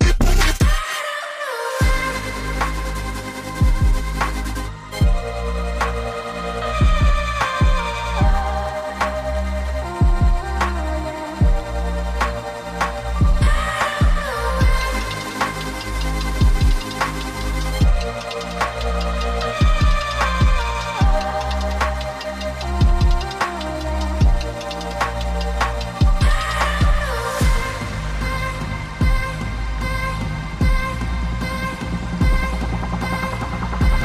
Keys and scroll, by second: 15.8 z, 18.3 v.